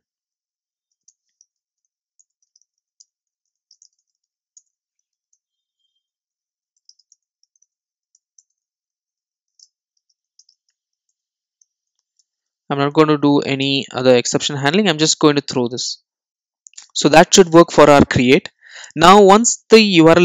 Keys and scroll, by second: 2.2 Return, 11.1 Return, 14.8 super+s.